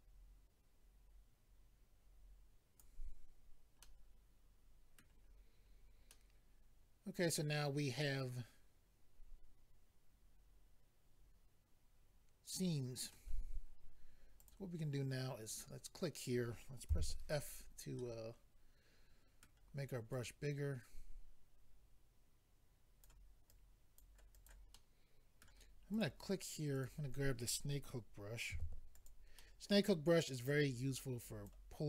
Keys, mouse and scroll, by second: 3.8 middle click, 5.3-6.1 scroll down 4, 6.1 middle click, 14.4 click, 14.5 click, 15.5 click, 15.6 click, 16.9 f, 17.4 click, 17.5 click, 18.0 middle click, 20.1 click, 23.5 click, 24.3 click, 24.7 middle click, 25.9 click, 26.7 click, 28.9 click, 28.9 f, 29.4 middle click, 30.5 click.